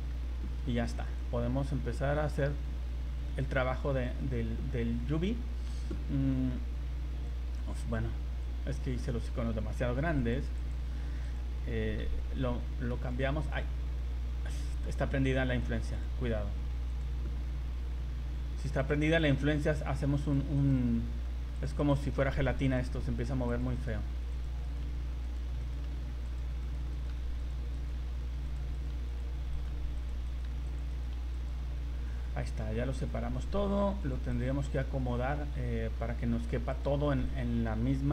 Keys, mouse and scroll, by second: 0.1 scroll, 0.9 s, 3.4 click, 4.3 scroll down 2, 4.6 scroll up 1, 7.3 click, 8.4 click, 11.2 right click, 13.5 g, 15.9 click, 18.2 g, 19.2 right click, 19.7 g, 20.6 right click, 21.0 g, 21.8 right click, 22.1 g, 22.9 right click, 23.2 g, 23.8 right click, 23.9 g, 24.6 right click, 24.8 g, 25.6 right click, 25.8 g, 26.6 right click, 27.1-31.1 typing, 27.7 right click, 28.7 right click, 29.5 right click, 30.3 right click, 30.9 right click, 32.1 scroll down 1, 33.0 right click, 33.2 g, 34.3 right click, 34.8 g, 37.3 right click.